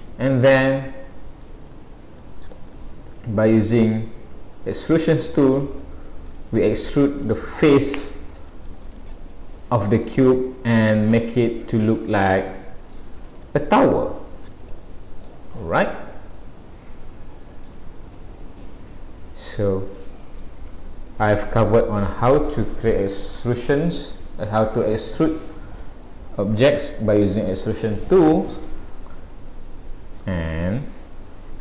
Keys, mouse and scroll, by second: 3.9 click, 5.7 middle click, 8.4 middle click, 13.4 middle click, 15.7 middle click, 29.5 shift+middle click.